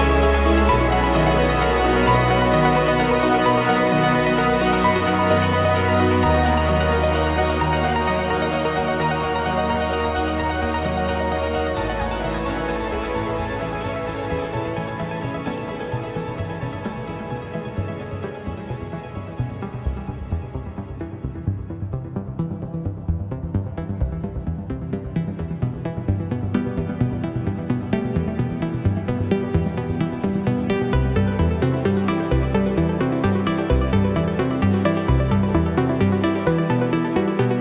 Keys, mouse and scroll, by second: 0.8-2.4 drag, 3.1 click, 3.8 click, 4.5-5.9 drag, 6.2-6.5 scroll down 2, 7.1 0, 11.1 click, 11.8 click, 12.6 click, 15.5 click, 16.2 click, 16.8 click, 18.2 ctrl+click, 19.8 click, 21.0 click, 22.2-23.3 scroll up 2, 23.3 click, 25.0 click, 26.4 ctrl+click, 27.8 click, 28.5-30.9 drag, 31.7 click, 32.6 click, 33.6 space, 34.9 click, 35.3 click, 36.3 click, 37.4 click.